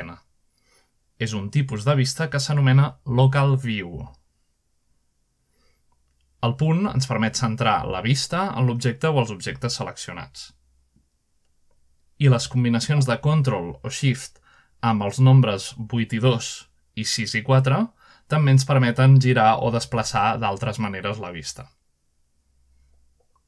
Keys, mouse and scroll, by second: 0.0-1.2 scroll down 2, 0.7 /, 2.0 shift+click, 3.0 /, 6.6 scroll down 1, 6.9 scroll up 2, 8.0 /, 9.1 click, 10.4 typing, 11.1-11.6 scroll down 1, 11.6-13.3 middle drag, 14.2 click, 14.6-16.0 drag, 16.7 ctrl+Delete, 17.2 ctrl+Delete, 17.6 ctrl+Delete, 17.7 ctrl+Delete, 18.0 ctrl+KP_2, 18.4 ctrl+KP_2, 18.6 ctrl+KP_2, 18.8 ctrl+KP_2, 19.0 ctrl+KP_2, 19.2 ctrl+KP_2, 19.3 ctrl+KP_2, 22.0-23.4 typing.